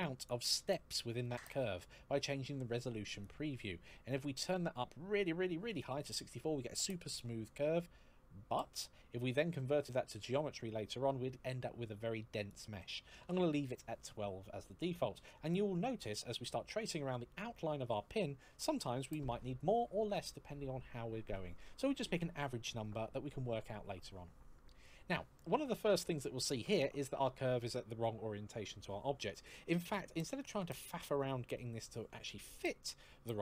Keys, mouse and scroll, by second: 3.0 click, 12.3 click, 12.9 KP_1, 13.0 KP_2, 13.0 KP_2, 13.3 Return, 25.1 middle click.